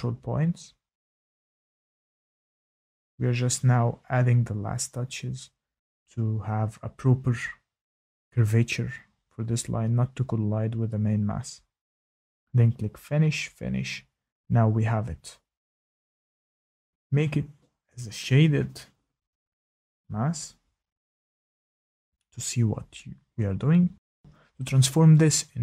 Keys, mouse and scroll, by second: 3.6-4.2 scroll, 4.2 click, 9.0 click, 9.1 click, 9.1 shift+middle click, 9.3 click, 9.6 click, 11.6 click, 13.4 click, 14.3 click, 15.4 shift+middle click, 15.6 click, 20.7 shift+middle click, 21.6 click.